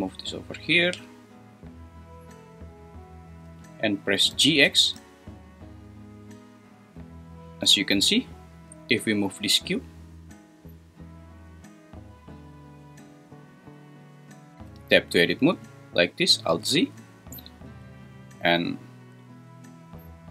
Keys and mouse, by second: 4.3 g, 4.6 x, 14.5 Escape, 14.6 Tab, 16.5 alt+z, 19.4 click.